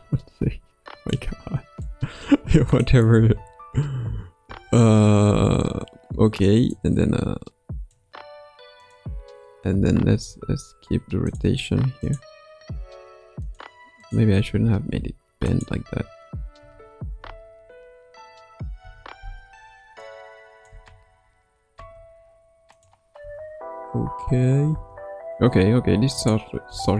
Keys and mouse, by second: 1.1-1.8 drag, 3.1 space, 4.4 space, 6.7-7.9 drag, 8.8 click, 10.0 r, 12.0 click, 12.6 r, 14.4 r, 16.6 a, 18.8 i, 20.0-20.7 drag, 20.7 space, 21.7 space, 22.7 click, 23.2 space, 24.7 space, 26.6 space.